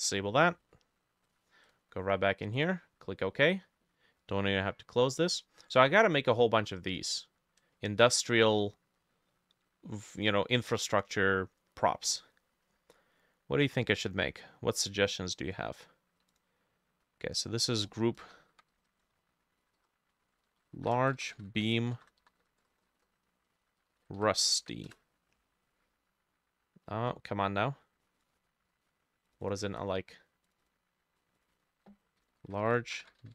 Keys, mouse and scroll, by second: 1.7-3.7 drag, 17.9 F2, 17.9-21.0 drag, 18.3-24.6 typing, 19.7 shift+middle click, 20.2 ctrl+middle click, 27.0 Escape, 29.5 double click, 30.7 double click, 31.6 F2, 32.0-33.3 typing.